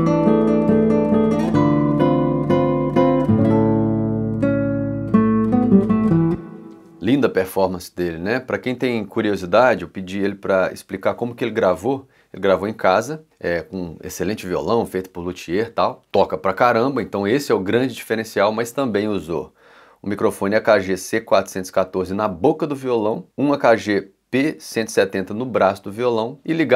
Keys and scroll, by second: 5.7 space.